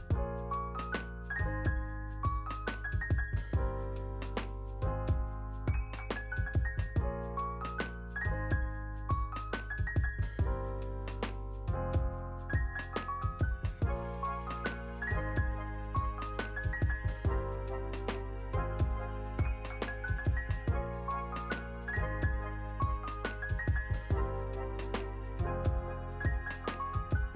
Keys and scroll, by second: 0.0-1.7 typing, 2.4 ctrl+a, 3.2 Return, 7.0 ctrl+v, 10.2 u, 11.8 r, 14.0 ctrl+v, 17.6 ctrl+c, 18.5 ctrl+v, 19.6 space, 21.7 space, 22.0 ctrl+s, 25.8 space.